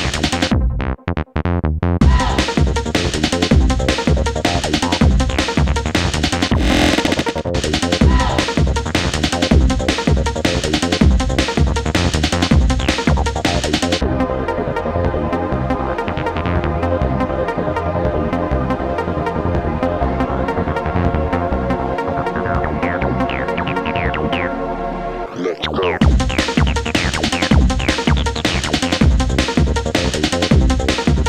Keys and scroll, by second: 17.7 Escape, 18.4 Escape, 29.4 Delete.